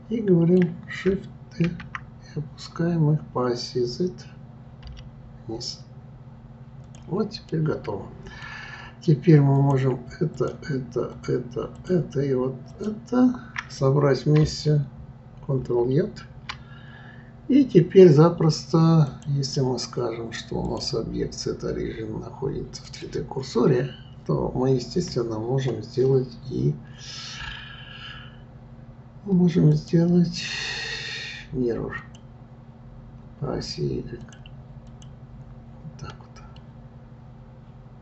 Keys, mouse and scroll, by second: 1.7 shift+d, 7.5-9.5 middle drag, 9.5 click, 10.3 shift+click, 11.1 shift+click, 11.7 shift+click, 12.7 shift+click, 15.6 ctrl+j, 19.1 click, 20.6-23.7 drag, 29.7-32.7 drag, 34.2 click, 34.9 click, 35.8-36.5 scroll down 2, 36.5-38.0 middle drag.